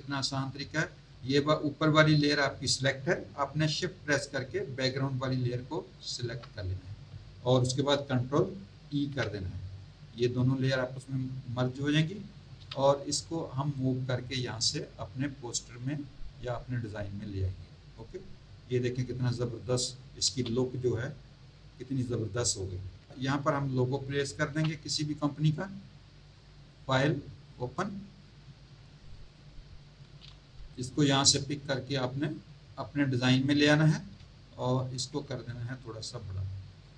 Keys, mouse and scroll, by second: 6.0 shift+click, 8.9 ctrl+e, 12.6 v, 13.8 click, 17.6 click, 20.3 z, 20.8 click, 22.2 click, 24.5 v, 26.7 click, 27.4 click, 29.0 click, 30.5 v, 30.7 click, 34.7 ctrl+t, 35.8 shift+click.